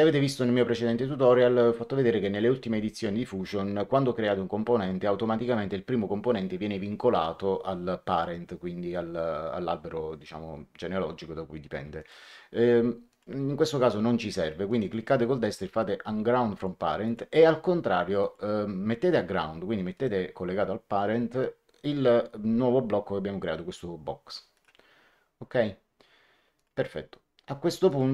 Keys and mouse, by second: 11.9 right click, 13.0 click, 14.6 right click, 16.5 click, 18.1 click, 19.9 right click, 24.5 click, 26.5 click, 27.8 click.